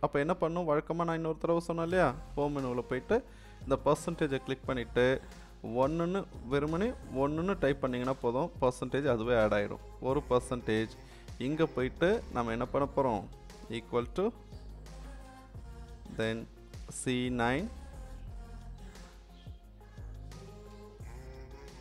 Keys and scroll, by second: 7.2 1, 14.8 =, 16.9 c, 18.9 9.